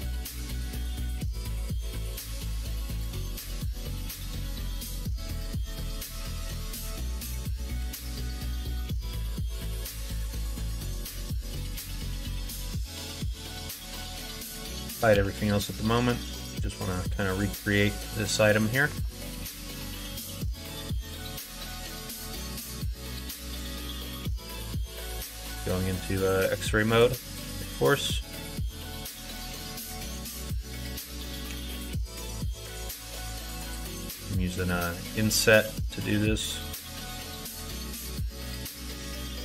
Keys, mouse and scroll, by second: 1.5 alt+click, 1.9-3.9 middle drag, 4.4-6.3 middle drag, 7.5 e, 10.8 middle click, 12.2 Tab, 13.0 shift+click, 14.3 ctrl+i, 15.1 h, 15.5 middle click, 16.1 middle click, 16.6 middle click, 17.1 middle click, 18.4 click, 18.8 Tab, 19.9 middle click, 20.1 middle click, 21.2 middle click, 22.0 KP_1, 22.3 KP_3, 22.6 alt+z, 24.8 e, 31.4 f, 33.0 i, 37.4 s.